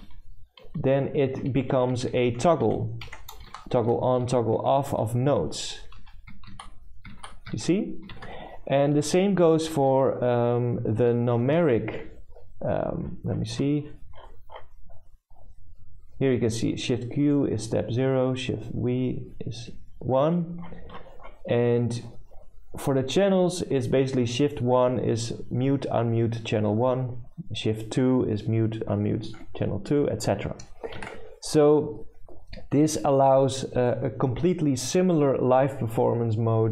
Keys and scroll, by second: 0.0-1.2 typing, 1.4 Left, 3.1-10.9 typing, 31.1 alt+Tab.